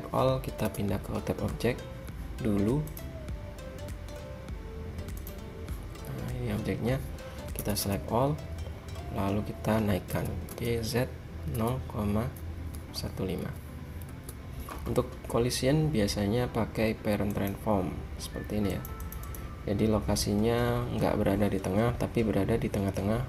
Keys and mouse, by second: 0.7 a, 3.0-4.8 drag, 5.3 click, 5.8-7.0 drag, 7.7 a, 7.9 a, 10.2 g, 17.4-21.2 drag.